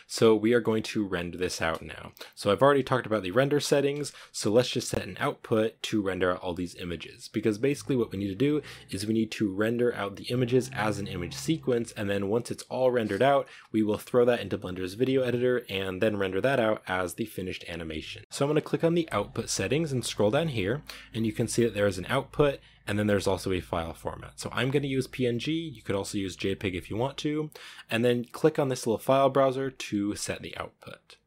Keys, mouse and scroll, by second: 0.8 space, 4.6-5.3 scroll up 1, 5.3 scroll down 1, 18.2-18.6 scroll down 1.